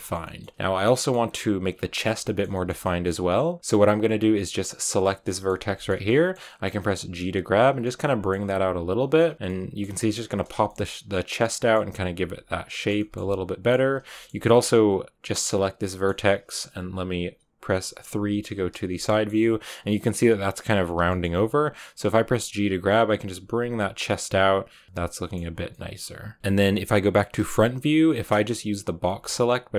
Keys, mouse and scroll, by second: 0.8 middle click, 1.0 scroll up 1, 1.1 scroll down 2, 1.5 Tab, 1.8-4.9 middle drag, 4.9 right click, 5.1 middle click, 5.8 scroll up 2, 5.9 middle click, 6.9 g, 7.6 scroll up 1, 7.7 middle click, 8.4 g, 8.9 scroll down 2, 9.1 middle click, 9.3 g, 9.4 middle click, 9.8 g, 10.4 scroll down 2, 10.6-11.7 middle drag, 11.7 Tab, 12.0 g, 12.6 shift+middle click, 13.2 middle click, 13.9-15.6 scroll, 14.0 shift+middle click, 15.6 shift+right click, 15.8-18.3 middle drag, 18.3 KP_3, 19.0 shift+middle click, 19.5-21.0 scroll, 21.0 shift+middle click, 21.9 g, 24.6 g, 24.8 middle click, 25.3 Tab, 25.5 scroll, 25.6 middle click, 26.4 Tab, 27.1 KP_3, 28.0 shift+middle click, 28.2 scroll up 1.